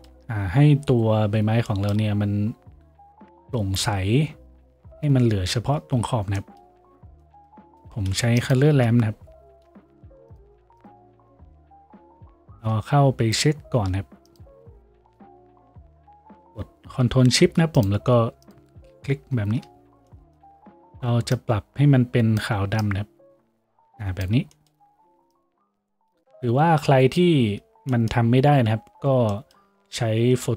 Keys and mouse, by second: 8.2 shift+a, 13.9-30.5 ctrl+middle drag.